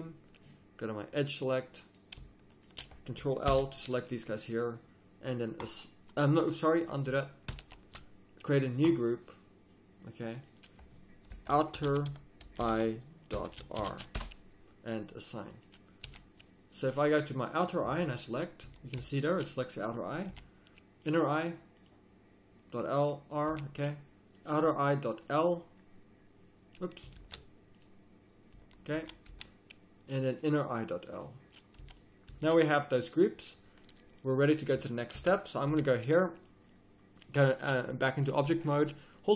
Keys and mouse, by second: 1.8-3.5 middle drag, 3.5 ctrl+l, 6.9 middle click, 7.5 ctrl+z, 16.1 a, 16.4 middle click, 18.7 z, 19.1 click, 20.3 a, 21.0-21.8 drag, 23.5 a, 27.2 ctrl+z, 28.5 z, 28.9 z, 29.3 a, 31.8 a, 32.3 z, 35.2 Tab, 35.7 a.